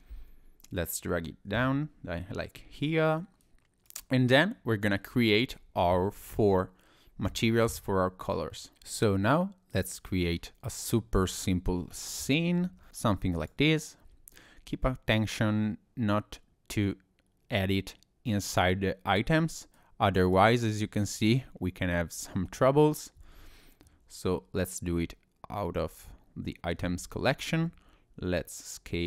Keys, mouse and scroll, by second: 9.7 click, 10.3-10.7 scroll down 2, 10.7 click, 11.0 middle click, 11.4-11.8 scroll up 3, 12.0 scroll down 2, 12.3 middle click, 12.6 shift+a, 19.8 click, 21.1 middle click, 23.2 ctrl+z, 23.8 middle click, 27.5 s.